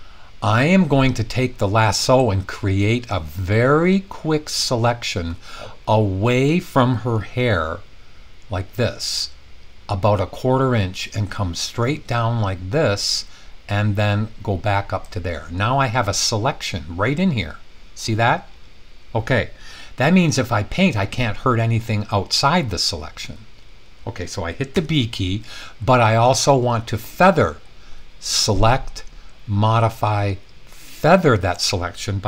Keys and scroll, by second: 24.8 b.